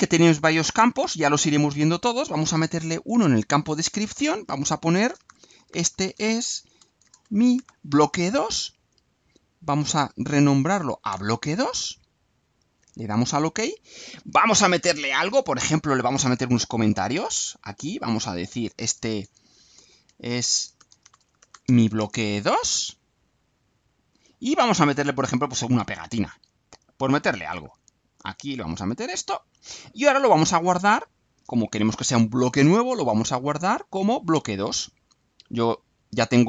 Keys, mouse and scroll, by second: 3.1 click, 4.8-8.4 typing, 9.8 click, 11.1 BackSpace, 13.0 click, 17.0 click, 17.9 click, 18.3 click, 20.3-22.4 typing, 23.4-24.3 drag, 24.5 click, 28.1 click, 29.5 click, 31.3 click, 34.1 click, 35.5 click.